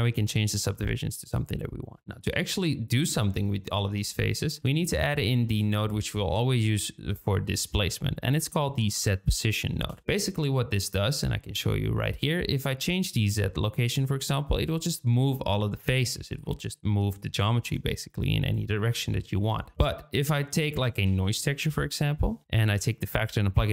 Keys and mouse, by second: 2.2 click, 5.3 shift+a, 11.4-12.1 middle drag, 13.1-16.1 drag, 17.9 click, 19.2 ctrl+z, 19.7 shift+a, 22.6-23.7 drag.